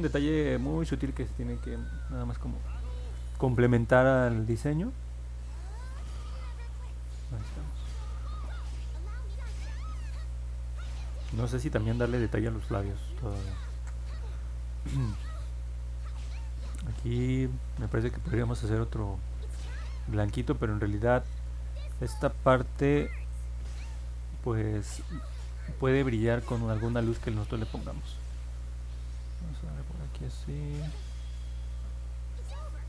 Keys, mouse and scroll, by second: 0.6-1.7 alt+drag, 2.0 middle click, 5.4 click, 5.8 click, 7.1 click, 8.4 scroll down 1, 9.2 alt+middle click, 10.9-11.2 scroll down 2, 24.8 click, 25.3 click, 25.8 click, 26.3 click, 26.8 click, 27.2 click, 27.6 click, 28.0 click, 28.5 click, 28.9 click, 29.3 click, 29.7 click, 30.1 click, 30.4 click.